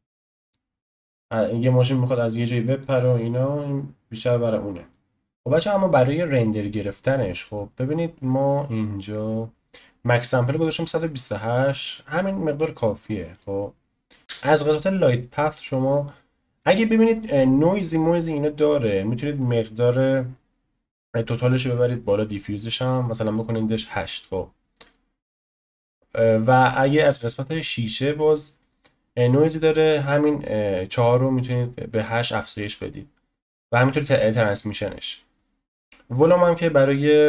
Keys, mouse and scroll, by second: 1.0 ctrl+z, 2.1-3.4 middle drag, 3.4-4.1 scroll down 1, 4.1-5.4 middle drag, 5.4-16.7 drag, 10.4-10.9 scroll down 2, 15.3-16.6 scroll down 1, 16.6-18.2 scroll down 1, 18.2-19.3 scroll down 1, 19.3-20.6 scroll down 1, 20.6-21.0 scroll down 1, 26.0-26.7 scroll down 1, 26.7-27.9 scroll down 1, 27.9-29.3 scroll down 1, 29.3-30.0 scroll down 1, 30.0-32.4 scroll down 1, 32.4-34.7 scroll down 1, 34.7-37.2 scroll down 1.